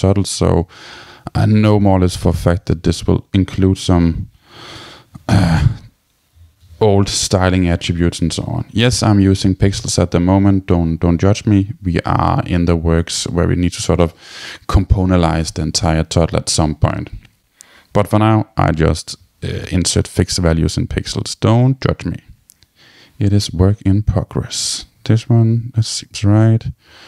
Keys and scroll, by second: 6.4 Tab.